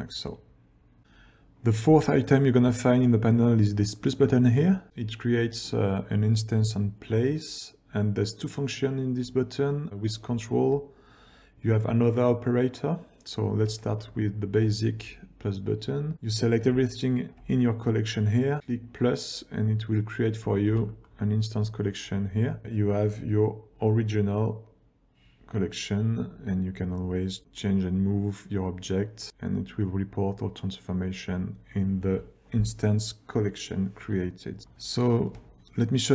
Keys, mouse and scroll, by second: 1.6 click, 2.9 ctrl+scroll down 1, 14.2 shift+click, 16.3 click, 17.1 ctrl+click, 18.6-19.2 ctrl+scroll down 1, 20.7 g, 22.6 click, 23.8 click, 24.7 click, 26.0 click, 26.7 click, 27.4 g, 34.7 click, 36.0 shift+click.